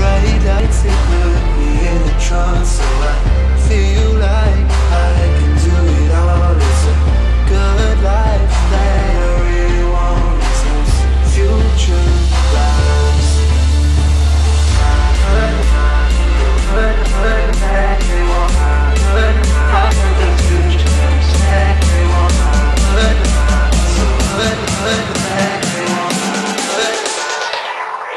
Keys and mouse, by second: 0.2 click, 0.4 right click, 3.4 click, 3.8 click, 5.5 right click, 6.2 click, 8.5 click, 12.0 click, 12.3 Left, 13.4 Up, 14.0 click, 14.5 ctrl+-, 15.0 space, 15.1 click, 15.3 space, 16.0 ctrl+=, 16.4 space, 16.6 click, 17.9 right click, 19.1 click, 19.9 right click, 20.8 click, 22.2 right click, 24.0 click, 24.1 ctrl+-, 24.8 space, 25.0 click, 25.1 space.